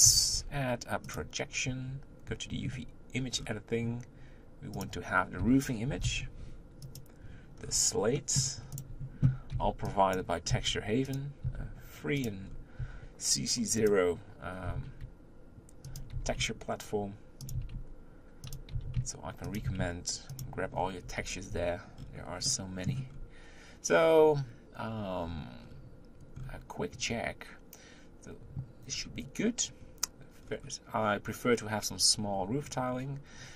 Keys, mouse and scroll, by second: 0.1 u, 3.4-4.7 scroll down 5, 4.7 click, 6.0 o, 7.6-8.1 scroll up 4, 8.1-8.7 middle drag, 8.7 click, 9.5 b, 10.5 s, 11.4 s, 12.4-12.8 scroll up 2, 12.8 s, 14.6 g, 16.1 g, 17.5 s, 18.7 g, 19.6 s, 20.7 scroll up 4, 21.0 Tab, 22.0-22.4 scroll down 4, 22.4-23.1 middle drag, 23.1-23.4 scroll up 3, 25.2-26.3 scroll down 4, 26.3-27.0 scroll up 3, 27.9 scroll up 1, 28.9 scroll down 2, 29.8-30.4 scroll up 2, 30.4-33.5 scroll down 3.